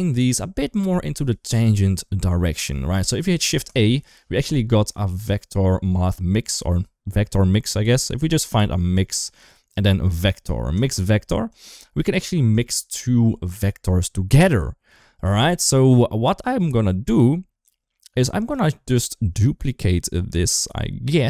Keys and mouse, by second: 2.8 click, 3.2 shift+a, 17.2 middle click, 18.0 click, 18.6 middle click.